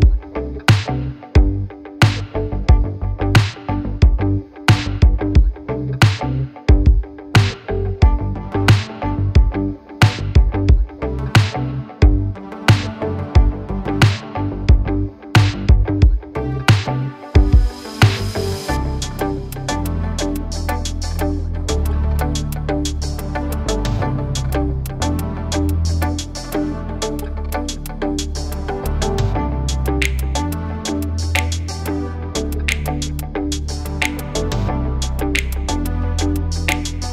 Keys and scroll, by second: 7.3 space, 10.7 Delete, 12.8 l, 13.7 Escape, 14.5 space, 15.4 l, 16.6 Escape, 17.6 Escape, 18.6 Escape, 20.3 Escape, 21.9 space, 27.6 l, 28.7 1, 29.1 Return, 30.9 space, 33.0 c, 35.3 6, 36.0 Return.